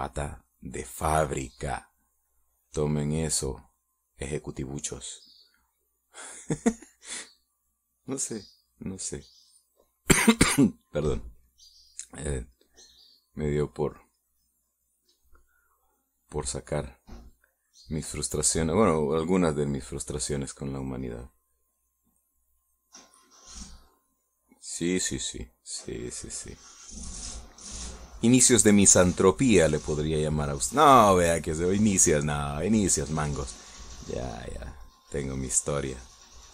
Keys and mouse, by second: 0.3-1.4 middle drag, 2.8 shift+middle click, 8.7-10.4 drag, 10.5 middle click, 12.4 middle click, 13.1-20.0 drag, 21.2-22.5 drag, 24.2 click, 25.9 click, 26.4-28.0 drag, 28.2 click, 28.7-31.9 drag, 32.0 middle click, 32.9-34.2 middle drag, 34.3 middle click, 35.0-36.5 drag.